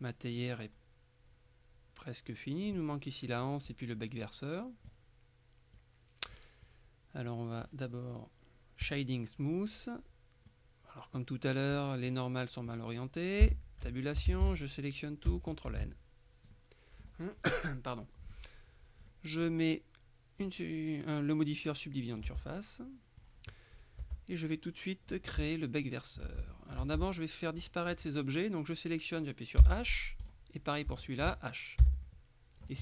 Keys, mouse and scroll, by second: 0.0 middle click, 3.5 middle click, 5.8-6.9 drag, 7.3 middle click, 8.9 click, 10.6-11.8 middle drag, 12.2-13.3 middle drag, 13.5 Tab, 14.0 shift+middle click, 14.4 shift+a, 15.8 ctrl+n, 16.6-17.6 drag, 18.1-18.6 scroll up 1, 19.1 click, 20.5 click, 21.8 middle click, 22.3 Tab, 24.1 Tab, 24.2-25.7 middle drag, 26.5 shift+middle click, 27.1 shift+Tab, 27.7 right click, 29.7 h, 30.3 right click, 30.7 scroll down 3, 31.0 shift+middle click, 31.9 h, 32.1-32.8 drag.